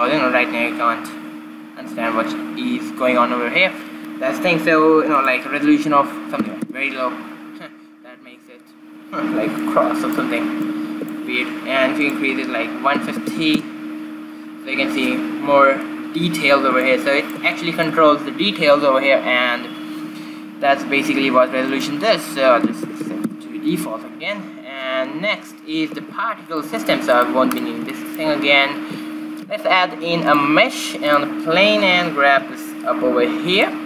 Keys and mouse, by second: 5.6-7.8 drag, 10.0-12.5 middle drag, 13.1-14.4 drag, 16.3-19.4 middle drag, 22.1-24.0 drag, 23.5 KP_0, 26.4 shift+z, 27.6 right click, 27.8 x, 28.2-29.4 drag, 29.2 shift+a, 32.2 z, 32.8 g.